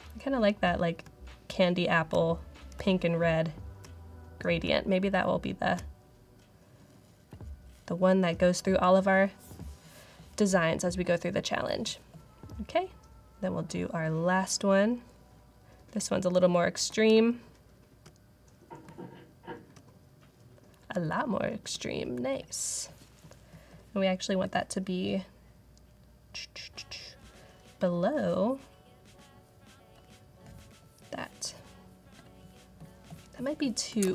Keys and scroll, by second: 0.9-5.6 typing, 15.9-16.7 typing, 18.7-19.7 typing, 20.8-21.6 typing, 33.9 super+t.